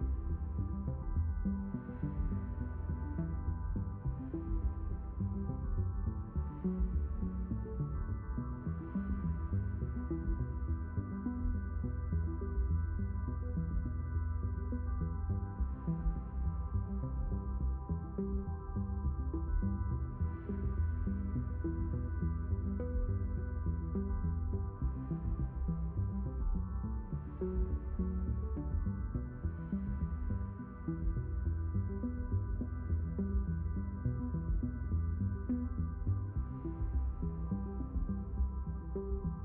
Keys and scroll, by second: 17.5 b.